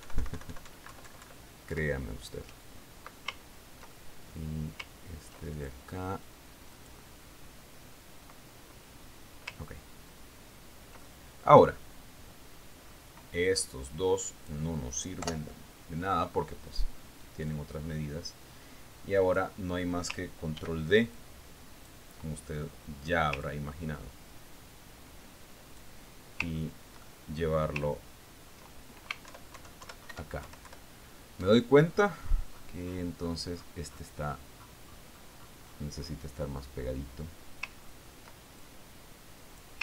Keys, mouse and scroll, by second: 0.4 alt+Left, 1.5 alt+Right, 2.4 alt+Left, 4.8-5.3 ctrl+scroll down 2, 5.3 ctrl+middle click, 6.4-8.2 ctrl+scroll up 5, 7.0 ctrl+click, 8.2 click, 11.2-11.7 ctrl+scroll down 2, 12.0 ctrl+scroll down 2, 12.5 ctrl+click, 14.1-14.5 scroll down 2, 14.5-14.9 scroll up 2, 14.9-16.1 drag, 16.7 Delete, 17.4-18.0 scroll up 2, 19.0-21.0 drag, 22.0 ctrl+d, 22.6-23.6 ctrl+drag, 23.8-24.8 ctrl+middle drag, 24.9-27.5 ctrl+drag, 28.0-28.4 ctrl+scroll up 1, 28.5 ctrl+click, 29.2-30.6 ctrl+scroll up 1, 30.6-30.9 scroll up 1, 30.8 alt+Down, 31.6 alt+Up, 31.9 alt+Left, 33.5-36.9 scroll up 12, 36.9-37.4 scroll up 2, 37.5-39.2 scroll up 2, 39.2 ctrl+scroll up 1, 39.3-39.7 ctrl+scroll down 2.